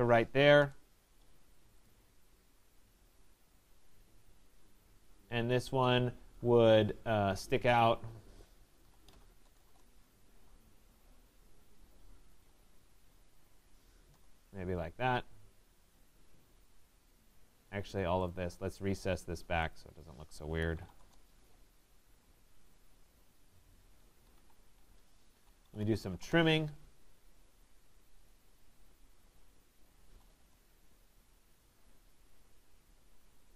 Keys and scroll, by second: 0.6 Return, 9.6 shift+Return, 21.0 Return, 26.1 Return.